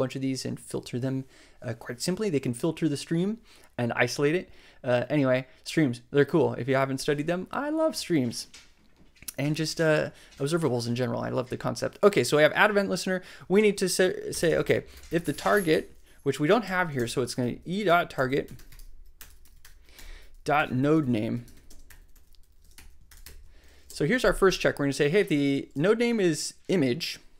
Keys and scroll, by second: 14.0-16.0 typing, 16.1 Up, 16.6 Down, 16.9 alt+shift+Left, 17.4 alt+shift+e, 17.4-21.7 typing, 22.7-23.7 typing, 23.8 shift+Right, 24.4 shift+Right.